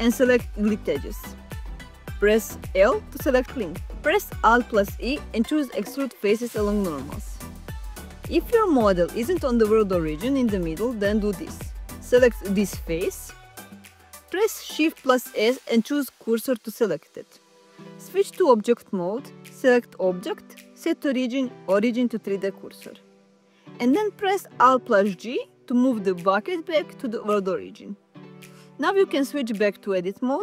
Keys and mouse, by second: 2.4 l, 4.2 alt+e, 6.0 click, 8.0 click, 8.3 Tab, 9.1 g, 9.4 x, 9.8 y, 10.3 click, 11.2 Tab, 13.5 3, 13.9 click, 14.7 shift+s, 20.3 Tab, 21.6-25.1 drag, 26.2 alt+g, 29.2 Tab.